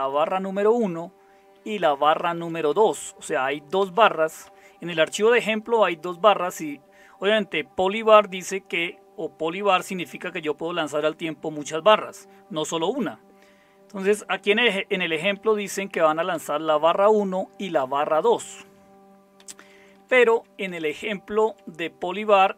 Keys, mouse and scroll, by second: 0.0 Right, 1.5 Down, 2.2 Left, 3.3 Up, 3.8 Down, 4.4 Up, 15.3 Down, 16.3 Up, 18.6 Down, 19.4 Left, 19.6 Left, 19.7 Left, 20.0 Left, 20.3-20.6 Left.